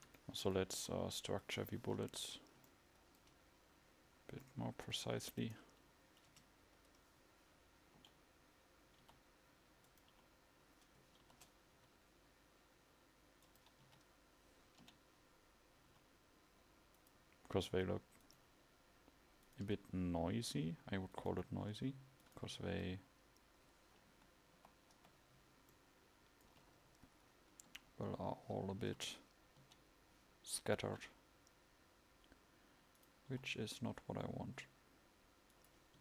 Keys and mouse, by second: 0.0 Escape, 0.8 KP_1, 3.5 KP_1, 6.5 Tab, 8.2 l, 9.2 r, 11.4 ctrl+z, 11.4 h, 11.9 g, 14.0 a, 15.0 l, 22.8 r, 22.8 a, 24.2 KP_4, 26.4 KP_4, 27.8 l, 28.9 a, 29.8 l, 31.0 g, 33.5 r.